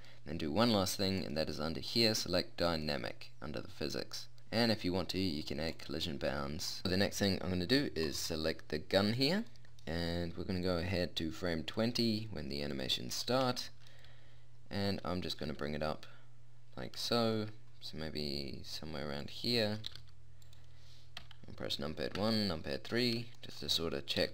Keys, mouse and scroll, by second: 6.8-8.1 middle drag, 8.6-10.1 middle drag, 15.3 g, 19.9 g, 21.2 KP_1, 22.2 KP_3, 24.2 g.